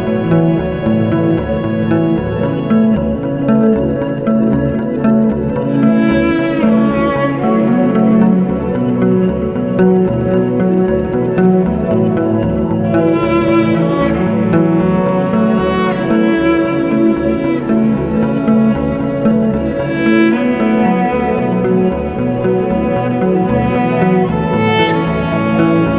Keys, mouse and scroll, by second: 1.1-6.5 drag, 15.7 click, 18.0 drag, 18.9 click, 21.6 click, 23.1-25.9 middle drag.